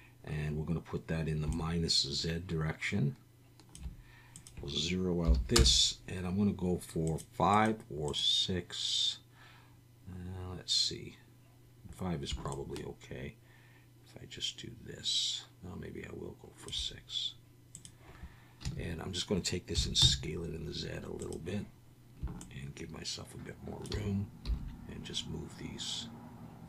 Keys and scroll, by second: 18.6 a, 19.7 s, 20.0 z, 24.5 g.